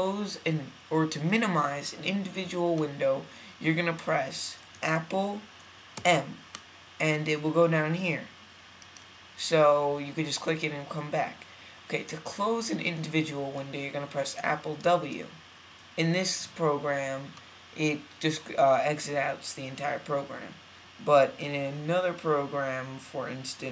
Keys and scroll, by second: 5.9 super+m, 14.9 super+w.